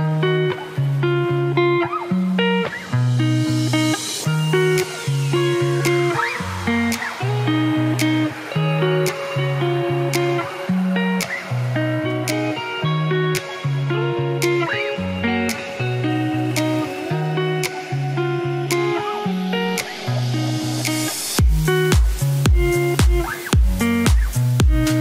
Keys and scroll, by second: 22.9 ctrl+a.